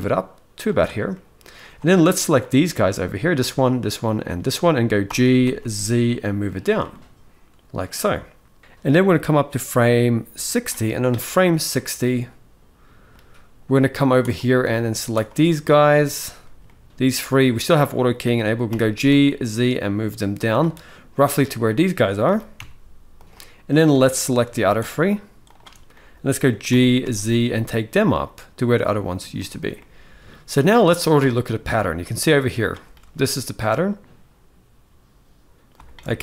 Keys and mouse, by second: 0.8-1.3 middle drag, 3.1 shift+click, 4.8 g, 6.6-7.6 middle drag, 9.0-10.3 drag, 11.4-12.8 middle drag, 13.9 click, 14.8 shift+click, 16.4-17.1 middle drag, 18.4 g, 20.6-20.9 middle drag, 22.0 g, 23.5 click, 23.8-24.1 middle drag, 24.5 shift+click, 25.6 middle click, 26.4 g, 29.5-30.0 middle drag, 30.6-32.4 drag, 32.5 space, 35.5 space.